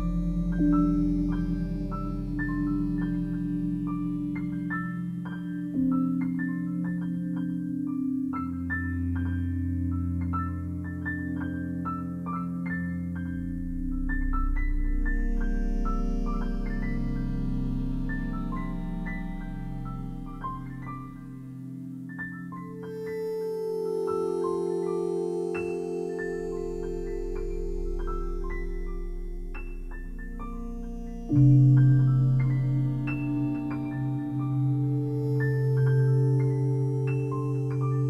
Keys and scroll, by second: 6.8 c.